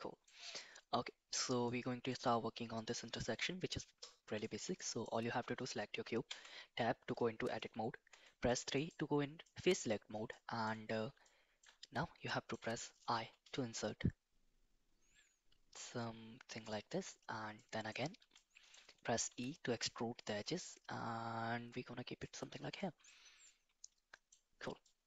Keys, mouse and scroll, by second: 1.7 middle click, 4.4 shift+middle click, 4.7 middle click, 6.3 Tab, 8.1 3, 8.7 click, 9.5 middle click, 10.3 shift+middle click, 11.2 shift+middle click, 12.3 shift+middle click, 13.3 i, 17.5 middle click, 18.3 shift+middle click, 19.3 e, 22.7 middle click, 23.4 middle click, 24.8 middle click.